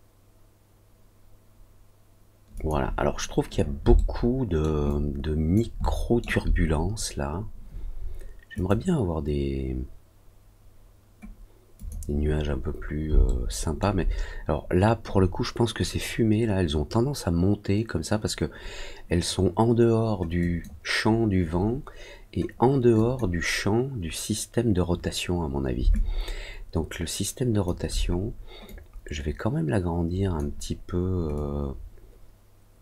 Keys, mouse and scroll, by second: 2.5 click, 3.9 alt+middle click, 4.8 alt+click, 5.7 alt+middle click, 8.5 click, 11.7 click, 13.2 alt+middle click, 20.3 click, 22.9 click, 25.9-27.6 alt+drag, 28.6-30.3 drag, 31.3-32.8 drag.